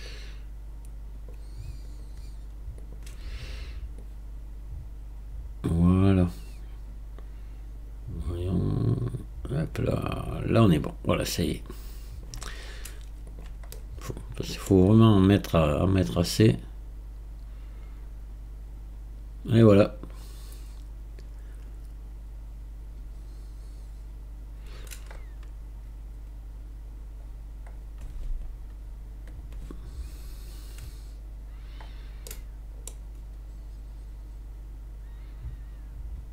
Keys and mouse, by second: 0.1-1.3 drag, 2.0-3.0 right drag, 4.0-12.3 drag, 13.4 click, 13.7-14.7 middle drag, 15.9 click, 29.8 click, 32.3 middle click.